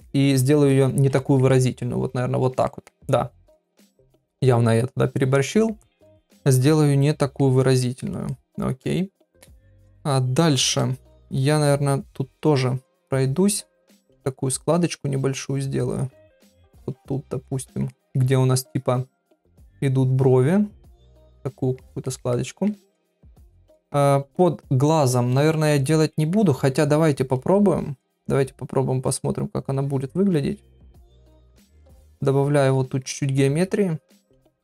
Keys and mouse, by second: 0.0 ctrl+click, 0.3 ctrl+click, 0.7 ctrl+click, 1.2 ctrl+middle click, 1.5-2.5 middle drag, 2.7 ctrl+middle click, 3.1 middle click, 4.4-5.7 middle drag, 6.2-7.4 middle drag, 7.8 ctrl+middle click, 8.3 middle click, 9.5 middle click, 9.9 middle click, 12.8 ctrl+click, 13.1 ctrl+click, 14.4 ctrl+click, 14.9 ctrl+click, 15.3 ctrl+click, 15.9 ctrl+click, 16.3 middle click, 17.2 ctrl+click, 17.9 middle click, 18.7 ctrl+click, 19.5 ctrl+click, 19.7 ctrl+click, 20.0 ctrl+click, 20.4 ctrl+click, 20.6 ctrl+click, 21.0 ctrl+click, 21.3 middle click, 22.0 ctrl+middle click, 22.3 middle click, 22.8 ctrl+middle click, 23.5 middle click, 26.1 middle click, 28.0 middle click, 29.8 click, 30.5 click, 31.0 click, 31.4 click, 31.8 click, 32.3 click, 32.6 click, 33.1 middle click, 34.0 click, 34.4 click.